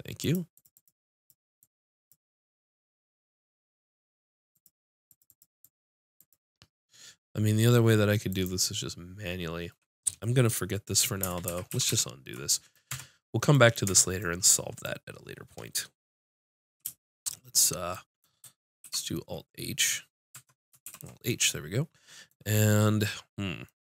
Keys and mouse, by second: 0.5-2.4 drag, 5.3 click, 11.5 ctrl+z, 11.7 ctrl+z, 11.9 ctrl+z, 12.5 click, 12.9 Tab, 13.9 Tab, 16.8 alt+space, 18.8 alt+h, 20.3 Tab, 20.8 alt+h.